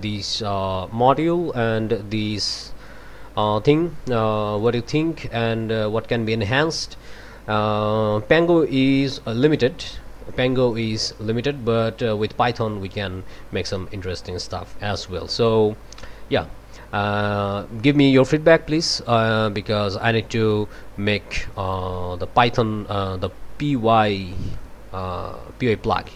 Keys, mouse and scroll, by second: 2.8 click, 4.6 click, 10.7 click, 15.3 click, 19.3-23.4 drag.